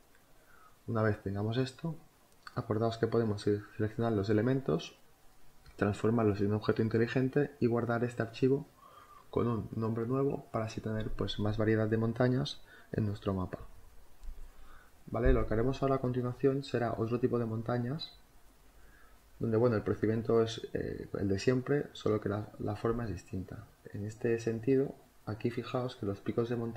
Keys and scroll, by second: 10.9-14.4 typing.